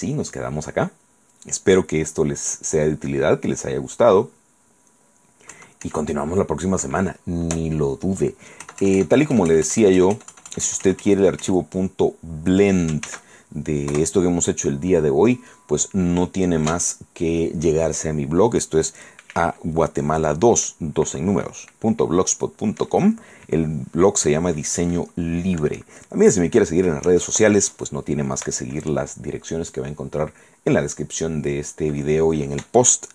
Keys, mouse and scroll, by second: 5.0-5.7 scroll down 1, 5.7 KP_Add, 5.7-6.3 scroll up 1, 6.3 right click, 8.4 scroll down 1, 8.5 right click, 8.7 click, 8.8 KP_Add, 13.3 ctrl+s, 14.1 KP_Enter.